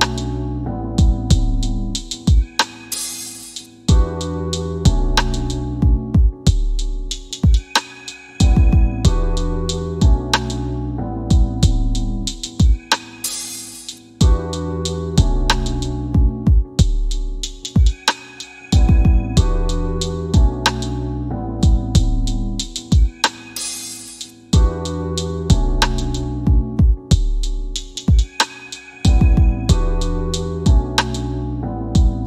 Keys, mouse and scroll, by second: 1.1 KP_1, 1.2 KP_0, 1.4 KP_Enter, 4.0 click, 7.2 KP_6, 7.5 KP_Enter, 8.7 click, 9.7 w, 10.7 w, 11.1 scroll down 1, 13.7 click, 17.9 8, 19.4 click, 21.7 right click, 22.5 click, 25.5 click, 29.8 shift+q, 31.1 scroll down 1.